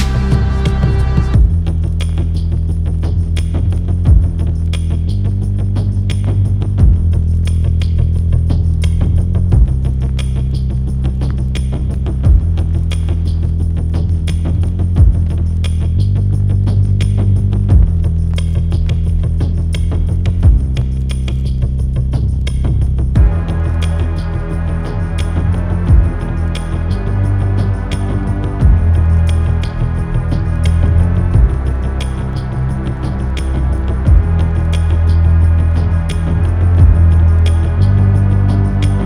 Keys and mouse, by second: 5.5 click, 13.1-17.6 drag, 13.1 0, 17.6-22.7 middle drag.